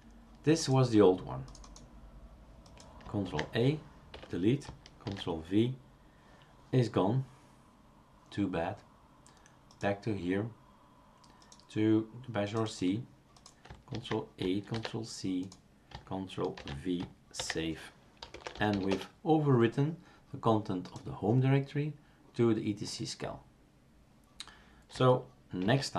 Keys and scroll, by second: 3.2 ctrl+a, 4.1 Delete, 5.0 ctrl+v, 14.0 ctrl+a, 14.7 ctrl+c, 16.6 ctrl+v, 17.4 ctrl+s, 19.9 Return, 19.9 typing, 25.6 shift+super+q.